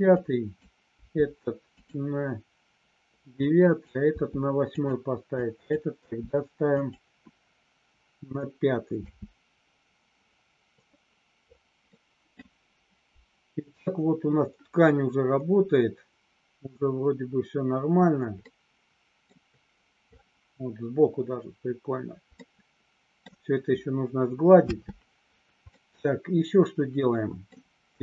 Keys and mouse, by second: 0.1 click, 0.8 g, 1.7 click, 3.4 click, 4.1 g, 5.4 click, 6.0 g, 6.7 click, 9.0 space, 11.8 middle click, 18.4 middle click, 22.3 middle click, 24.6 space, 25.6-27.5 middle drag.